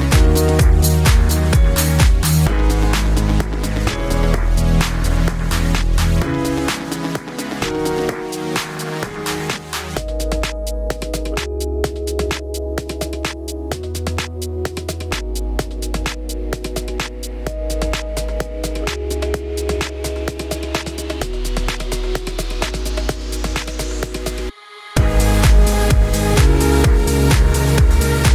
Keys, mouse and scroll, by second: 0.1 click, 0.8 click, 1.3 click, 1.4 click, 2.2 click, 2.3 click, 2.6 click, 2.8 click, 3.1 click, 3.3 click, 3.8 shift+click, 4.0 click, 4.1 click, 4.4 drag, 4.6 click, 4.8 click, 5.1 click, 6.1 middle click, 6.8 click, 6.9 click, 7.6 click, 8.0 click, 8.3 click, 8.7 click, 8.8 click, 9.3 click, 9.6 click, 9.8 ctrl+v, 10.3 click, 10.5 click, 10.9 click, 11.1 click, 11.5 click, 12.6 click, 13.0 click, 13.0 -, 13.1 click, 13.8 click, 14.1 click, 14.8 click, 15.5 click, 15.9-16.5 drag, 16.7 click, 16.8 drag, 17.1 click, 17.4 click, 17.7 -, 17.8 click, 18.6 click, 19.3 drag, 19.5 click, 19.7 click, 20.4 click, 20.8-21.4 drag, 21.6 click, 21.7 click, 22.5 click, 22.8 click, 22.9 click, 23.0 click, 23.2 click, 23.4 click, 24.0 click, 24.1 -, 24.2 click, 24.4 middle click, 24.8 click, 25.0 click, 25.5 click, 25.8 right click, 26.1 click, 26.2 right click, 26.4 click, 26.6 click, 26.8 click, 27.2 click, 27.4 click, 27.7 click.